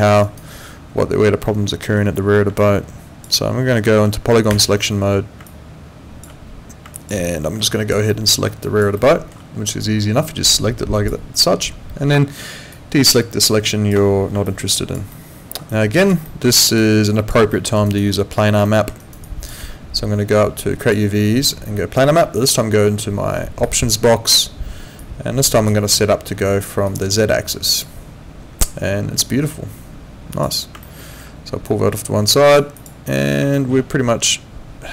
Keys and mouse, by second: 0.2 alt+right click, 1.4 alt+middle click, 2.6 alt+click, 4.5 F11, 5.5 alt+click, 6.9 alt+click, 7.2 alt+middle click, 7.7 alt+click, 8.1 alt+middle click, 8.6 alt+click, 9.0 alt+middle click, 10.3 click, 12.7 ctrl+click, 14.5 alt+click, 15.1 alt+middle click, 15.7 alt+click, 16.2 alt+middle click, 16.5 alt+right click, 16.8 alt+click, 17.5 alt+middle click, 17.8 alt+right click, 18.0 alt+click, 18.7 alt+middle click, 19.0 alt+right click, 19.2 alt+click, 20.8 click, 23.6 click, 25.0 click, 26.9 click, 30.3 click, 30.8 alt+middle click, 31.7 click, 32.7 click, 33.5 alt+middle click.